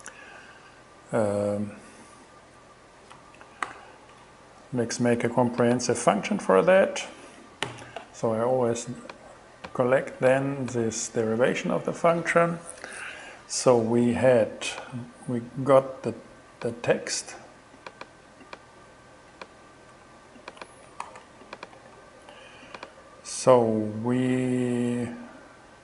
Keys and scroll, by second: 3.7 super+z, 7.7 super+n, 21.1 shift+super+c, 21.7 super+c, 21.8 super+v.